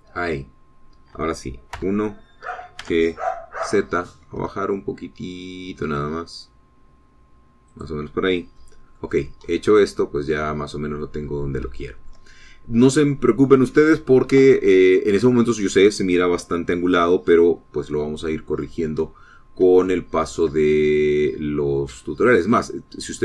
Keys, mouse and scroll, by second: 1.0 click, 2.9 KP_1, 3.9 g, 4.7 z, 8.8 click, 9.7 middle click, 10.4 scroll down 2, 10.6-12.3 middle drag, 12.4 scroll up 2, 13.0 shift+middle click, 20.2-20.8 scroll up 2, 21.0 shift+middle click, 21.8 shift+scroll down 1, 22.3-23.2 middle drag.